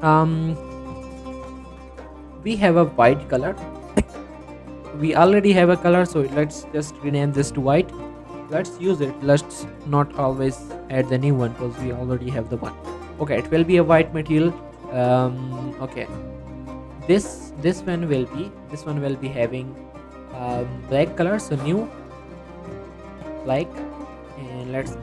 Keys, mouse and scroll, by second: 0.2 scroll up 1, 0.5 g, 0.7 right click, 1.1 middle click, 2.9 click, 6.2 click, 6.8 typing, 8.5-9.5 typing, 9.6 Return, 13.2-13.9 scroll down 1, 14.3 middle click, 14.9-15.3 scroll up 1, 16.8 click, 17.4 g, 17.7 right click, 18.0 middle click, 18.2 z, 20.2-24.5 drag.